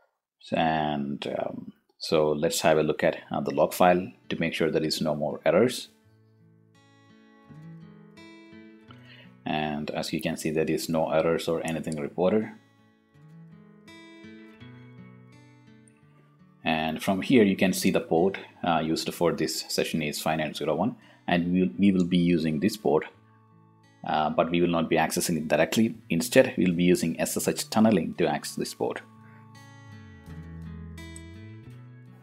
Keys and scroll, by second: 5.9 a, 6.3 t, 7.2 space, 7.7 shift+Insert, 8.3 Return.